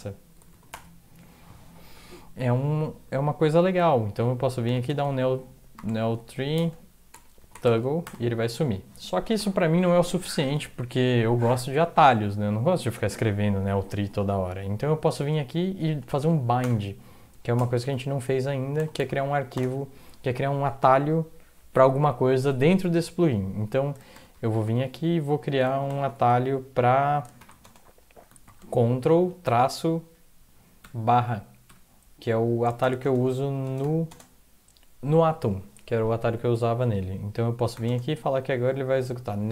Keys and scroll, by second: 0.5 ctrl+x, 0.7 0, 3.8 alt+x, 4.4-8.0 typing, 16.3 Left, 16.6 Return, 19.0-19.5 typing, 24.1 typing, 26.0 typing, 27.6-29.4 typing, 30.8-31.6 typing, 33.0-34.1 typing, 37.8 typing.